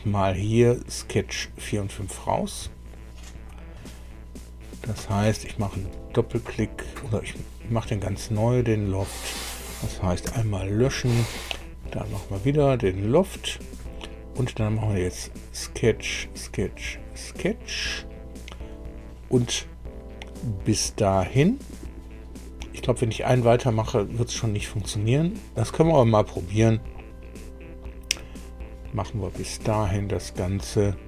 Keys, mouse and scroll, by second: 0.4 click, 5.4 click, 6.9 click, 8.6 click, 9.2 click, 10.2 Delete, 13.4 click, 15.1 click, 15.8 click, 16.7 click, 25.5 click, 29.3 click.